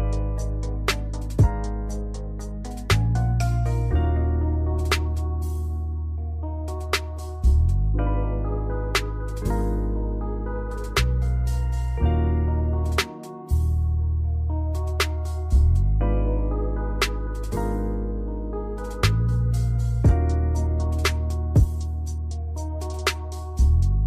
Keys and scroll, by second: 9.0 space, 11.1 space, 12.9 space, 14.2 space, 15.2 space.